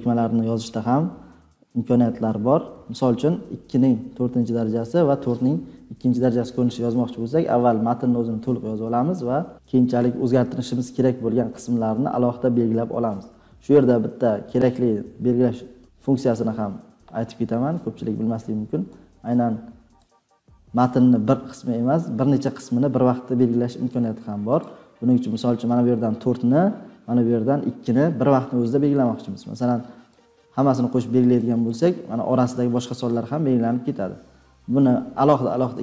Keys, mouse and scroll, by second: 2.3 =, 3.3 Left, 3.4 Left, 3.5 Left, 3.7 Left, 4.2 Left, 6.2 click, 19.9 click, 24.6 click, 31.3 click, 31.7 click.